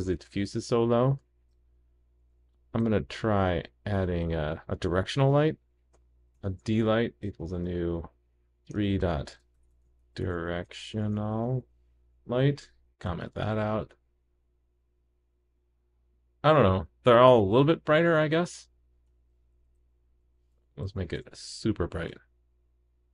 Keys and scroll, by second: 1.3 shift+super+d, 2.6 super+/, 5.9 super+d, 13.1 super+/, 13.3 super+s, 19.1 super+/, 21.1 super+s.